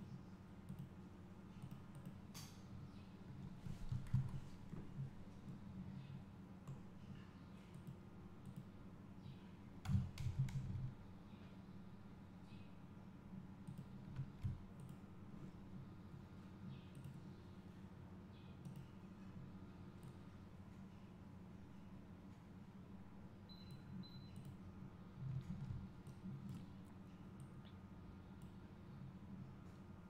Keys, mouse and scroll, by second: 3.2 `, 4.0 click, 4.2 KP_0, 5.4-8.0 drag, 5.6-6.5 scroll down 2, 6.5-8.0 scroll down 1, 10.0 g, 14.0 click, 18.7 click, 26.2 click, 28.7-30.0 drag.